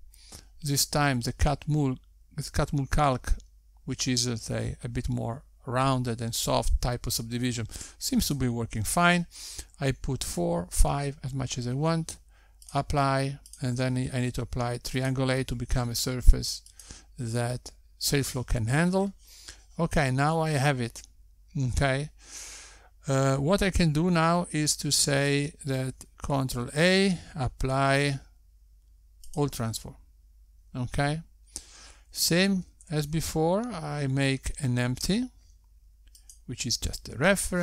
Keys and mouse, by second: 10.8 click, 15.5 click, 16.3 click, 19.4 click, 29.2 ctrl+a, 35.3 shift+a.